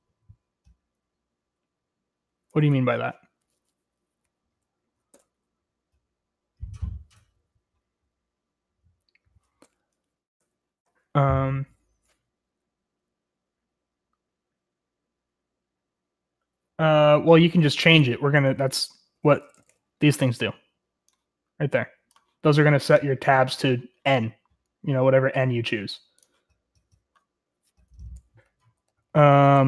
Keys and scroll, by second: 2.4 BackSpace, 2.6 BackSpace, 5.1 BackSpace, 10.3 Escape, 10.7 Escape, 18.5-19.7 typing, 28.4-29.6 typing.